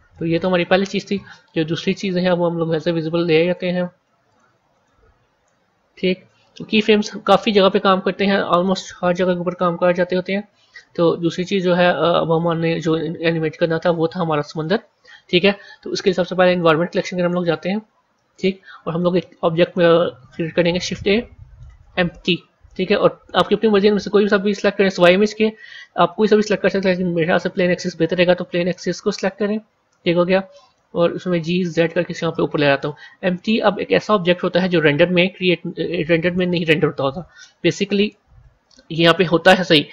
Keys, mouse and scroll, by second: 0.0-2.0 middle drag, 2.0 scroll down 1, 3.3 click, 4.2 click, 4.6 click, 7.3 scroll down 1, 8.9 a, 10.9 scroll down 1, 12.3 click, 12.8-13.4 scroll down 2, 13.4-14.4 scroll up 1, 14.4 click, 16.4 click, 16.8 scroll down 1, 18.2 click, 20.6 shift+a, 31.1 g.